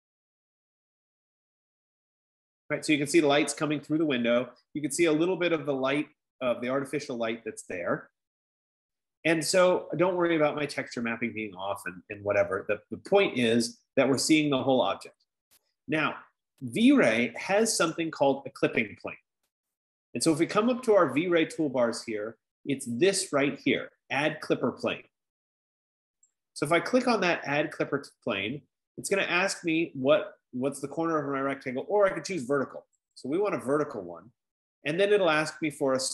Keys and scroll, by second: 22.9 F15.